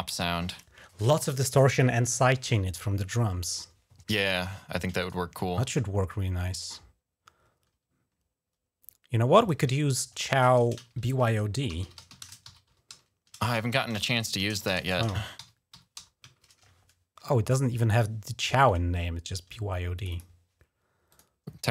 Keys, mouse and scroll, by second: 4.9 right click, 9.2 click, 11.2-17.9 typing, 19.8 click, 19.9 click, 20.1 click, 20.9 click.